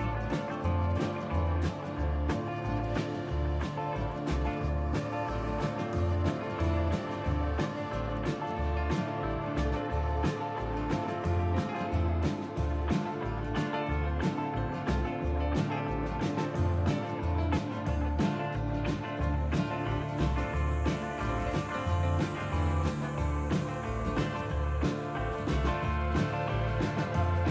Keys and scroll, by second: 2.6 Tab, 14.7 KP_Divide, 18.3 KP_Divide, 21.2 Tab, 27.1 f.